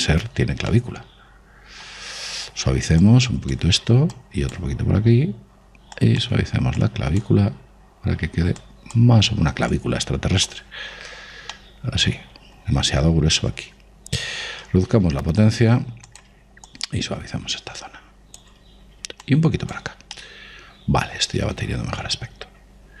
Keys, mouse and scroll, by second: 1.1-3.4 middle drag, 3.9-12.5 drag, 12.4-14.4 middle drag, 15.8 shift+f, 16.1 middle click, 17.6 click, 19.7-21.3 middle drag, 20.1 click, 21.9 middle click.